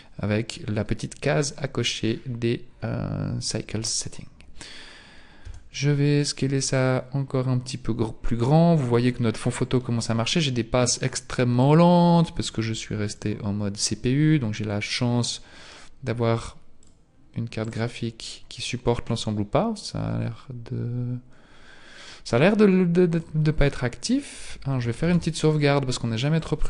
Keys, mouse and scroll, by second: 1.4 click, 5.4 s, 10.6 click, 11.8 click, 13.0 click, 16.8 click, 25.0 ctrl+s, 26.4 click.